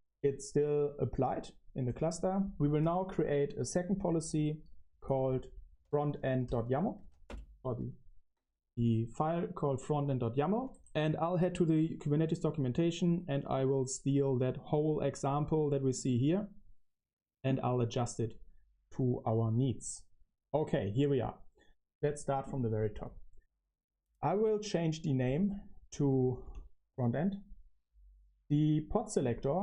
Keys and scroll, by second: 4.2 ctrl+c, 4.8-7.7 typing, 9.3 super+v, 9.8 Escape, 10.5-14.7 typing, 10.9 super+v, 25.1 typing, 26.3 Escape, 26.6-27.3 typing.